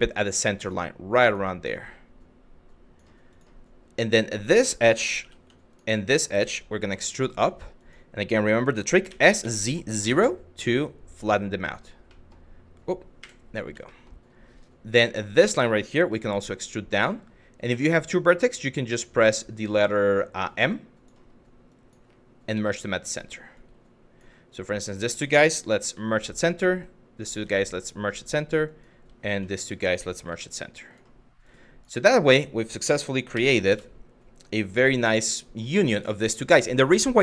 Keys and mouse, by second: 0.8 click, 1.4 click, 2.9 click, 4.0 click, 4.8 2, 5.3 shift+click, 5.7 shift+click, 6.4 e, 7.4 click, 8.7 s, 9.6 KP_0, 11.3 click, 11.7 middle click, 12.8 KP_1, 13.6 shift+middle click, 14.9 click, 15.7 e, 16.6 click, 17.3 1, 17.6 click, 19.8-20.7 drag, 21.4 click, 22.2 m, 23.3 click, 24.2 click, 25.5 m, 26.6 click, 27.0 m, 28.4 click, 29.3 click, 31.0 click, 33.0 s, 33.1 z, 33.3 KP_0, 34.2 click.